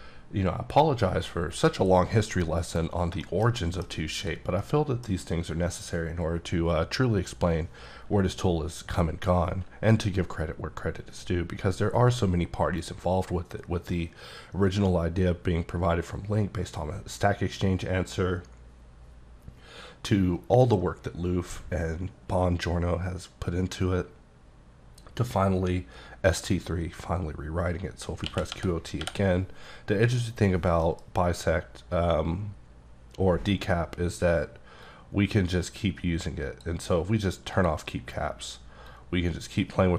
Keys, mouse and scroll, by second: 2.5 middle click, 2.8 scroll down 2, 3.2 middle click, 3.6 double middle click, 4.2 click, 4.6 middle click, 5.5-7.3 scroll down 1, 28.2 q, 28.5 o, 29.0 t, 30.8 F9, 34.8 click, 37.5 click, 39.2 click.